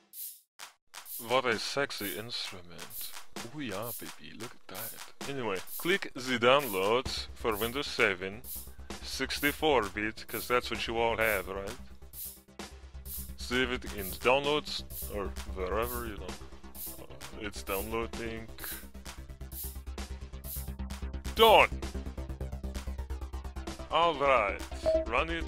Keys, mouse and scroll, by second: 1.2 scroll down 1, 2.9 click, 5.5 right click, 6.0 click, 11.2 scroll down 1, 12.1 click, 22.2 click.